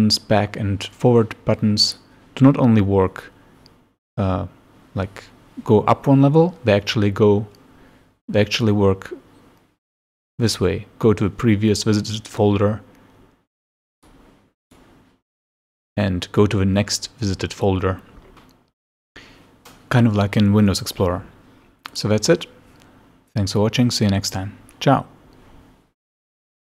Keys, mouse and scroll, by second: 1.9 click, 14.0 click, 14.7 click, 21.9 click.